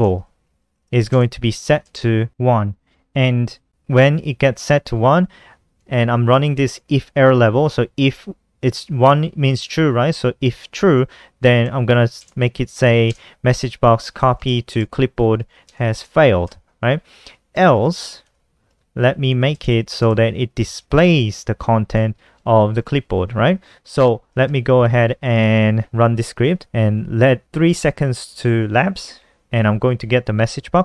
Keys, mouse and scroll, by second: 0.0-0.6 typing, 5.0 BackSpace, 5.3 Return, 10.7-20.2 typing, 21.2 Return, 21.6-22.3 typing, 23.4 Escape, 23.8 BackSpace, 24.2 ctrl+s, 26.0 click, 26.3 F5.